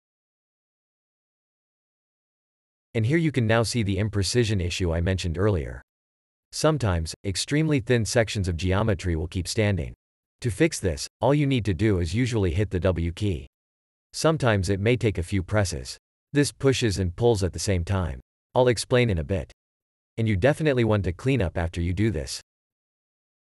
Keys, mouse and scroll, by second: 0.7 shift+e, 3.2 shift+click, 12.6 w, 17.8 space, 21.1 3.